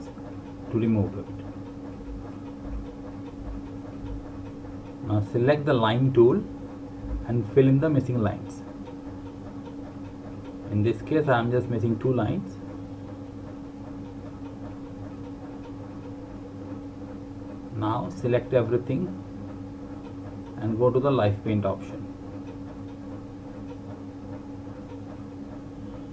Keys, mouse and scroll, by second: 0.2 alt+click, 1.0 alt+click, 2.0 alt+click, 4.8 click, 20.9 click.